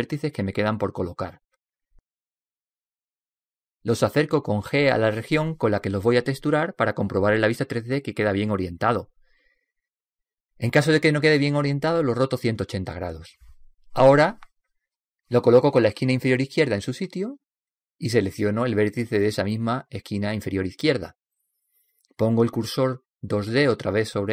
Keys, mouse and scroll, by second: 2.1 n, 3.4 n, 4.0 b, 6.0 g, 8.1-10.1 middle drag, 11.8 g, 18.6-21.3 right drag, 22.8 shift+s.